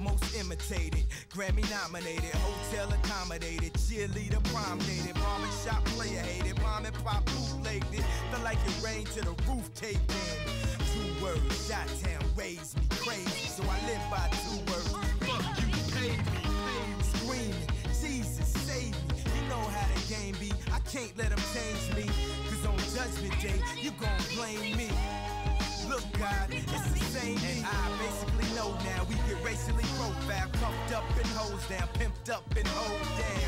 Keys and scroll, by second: 5.4 space, 12.8 space, 13.1 space, 18.0 space, 18.4 space, 23.4 space, 24.1 space, 26.4 space.